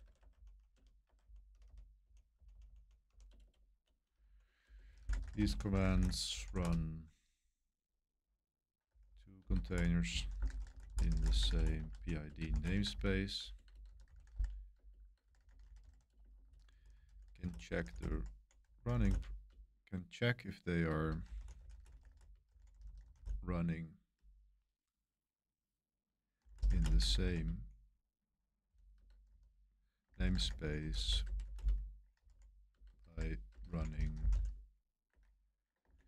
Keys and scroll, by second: 0.0-6.8 typing, 8.3-23.6 typing, 26.1-36.0 typing, 35.1 Escape.